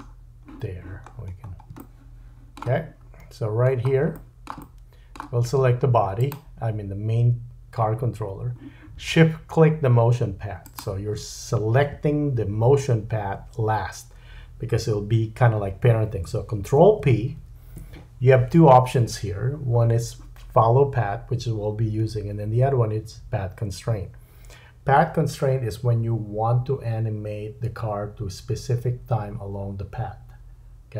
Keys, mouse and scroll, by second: 0.0-0.5 scroll down 3, 1.1-1.7 scroll up 4, 1.8 shift+middle click, 3.0-3.7 scroll up 3, 3.7-4.1 scroll up 2, 4.1 shift+middle click, 6.3-7.6 middle drag, 10.6 shift+click, 17.4 ctrl+p.